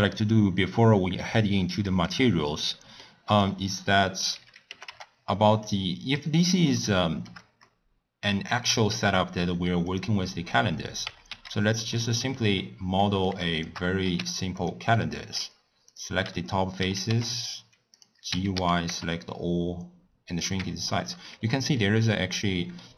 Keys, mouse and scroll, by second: 1.4-2.6 drag, 2.6-3.2 middle drag, 3.2 click, 3.6-4.7 scroll down 5, 4.7 g, 5.9-6.8 scroll up 7, 6.9-8.9 shift+middle drag, 8.9 shift+a, 10.7-11.0 scroll down 2, 11.0 Tab, 11.2 3, 11.5 click, 11.9 middle click, 12.4-13.0 scroll down 2, 13.0 middle click, 13.5 shift+click, 14.0 x, 14.9-15.9 middle drag, 15.9 click, 16.2 3, 18.2 a, 18.5 s, 20.6 Tab, 20.9-21.3 scroll up 3, 21.7-22.2 middle drag, 22.2-22.8 scroll up 1, 22.8-22.9 middle drag.